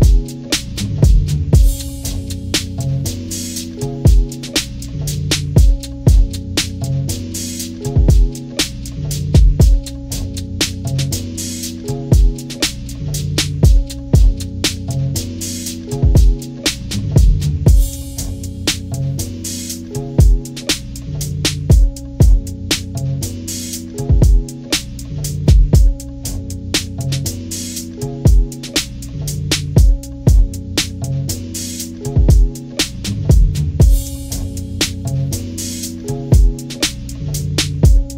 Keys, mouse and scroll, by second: 5.0-7.7 drag, 9.4 ctrl+-, 10.0 ctrl+-, 11.5 click, 12.2 ctrl+-, 12.5 ctrl+=, 13.2 ctrl+=, 13.6 click, 14.0 scroll down 2, 15.0 ctrl+-, 16.7-17.2 scroll up 4, 17.4 ctrl+=, 19.5-23.5 drag, 25.8 ctrl+-, 26.3 scroll up 2, 26.7 ctrl+=, 27.2 scroll down 2, 30.0-38.1 drag.